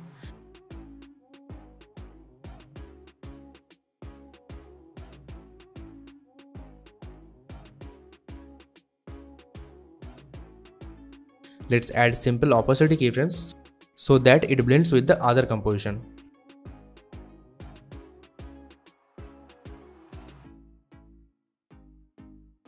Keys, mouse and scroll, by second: 5.3 space, 10.8 space, 10.9 click, 11.7 t, 12.8-13.9 drag.